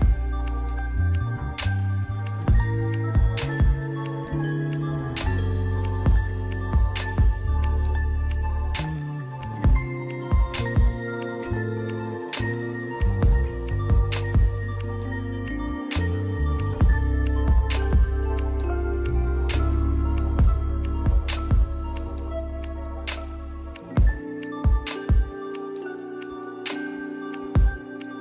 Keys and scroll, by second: 0.0 ctrl+z, 1.5 scroll up 1, 2.3 [, 4.4 scroll down 1, 4.5-4.8 scroll up 1, 6.7-7.1 scroll down 1, 8.5 scroll up 1, 9.2 ], 16.4 scroll up 1, 16.6 ctrl+z, 16.7 ], 16.9 ctrl+z, 22.3 scroll down 1, 23.7 scroll down 1, 23.9 scroll up 1, 24.0 scroll down 1, 24.3 scroll up 1, 24.5 scroll down 1, 24.7 scroll up 1, 26.4 scroll down 1, 26.6 scroll up 1.